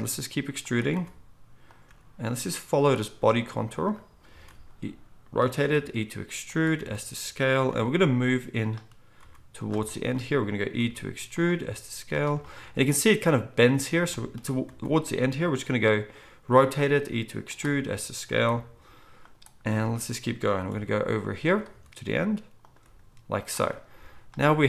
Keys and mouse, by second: 0.9 r, 1.9 g, 4.5 r, 5.7 e, 6.8 s, 7.7 g, 9.2 r, 10.8 e, 11.6 s, 16.4 e, 17.7 s, 18.5 g, 19.7 r, 20.6 e, 21.7 s, 22.8 g.